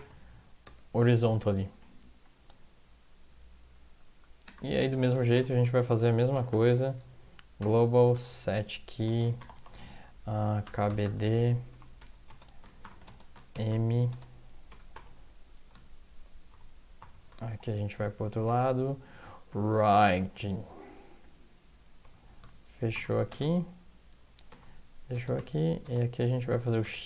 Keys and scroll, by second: 0.0-2.2 typing, 3.8-14.9 typing, 11.7 Right, 12.0 Left, 16.5-17.9 typing, 19.3-20.7 typing, 22.0 typing, 23.3 typing, 24.5-27.0 typing.